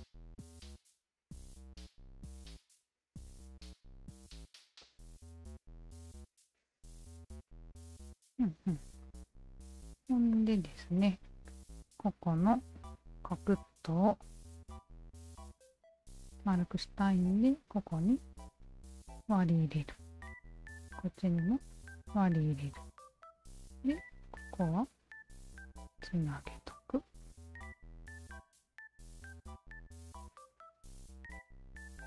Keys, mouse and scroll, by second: 1.1 shift+click, 1.6 click, 2.0 alt+shift+click, 3.6-4.6 shift+drag, 4.8-7.1 drag, 7.4 ctrl+z, 8.1 alt+click, 9.7 alt+click, 10.3 alt+click, 11.2 alt+middle click, 13.0 2, 13.5 alt+click, 14.9 q, 15.3 alt+right click, 15.6 alt+click, 17.4 s, 19.1 alt+click, 20.2 2, 20.7 alt+click, 22.1 s, 22.5 1, 23.5 alt+click, 24.3 alt+click, 25.0 shift+click, 25.9 s, 26.5 shift+click, 27.2 shift+click, 28.0 s, 28.8 shift+click, 29.4 shift+click, 30.4 s, 31.0 shift+click, 31.7 shift+click.